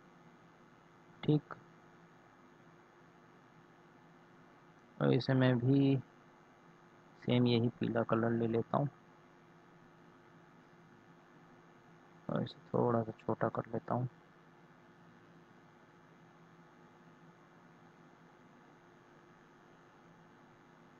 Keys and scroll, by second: 14.0 ctrl+z.